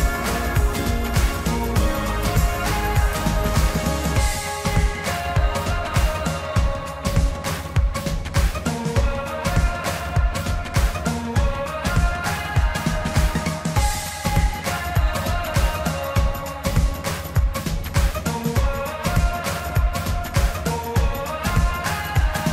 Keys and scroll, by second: 4.7 ctrl+t, 14.0 ctrl+t, 14.8 ctrl+t.